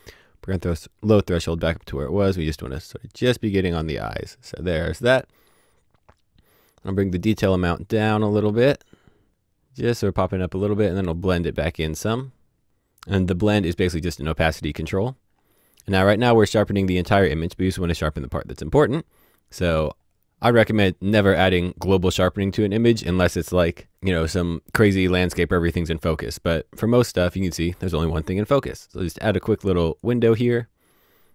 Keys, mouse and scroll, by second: 6.8 click, 15.0-18.3 scroll down 1, 18.7 click, 28.5 click.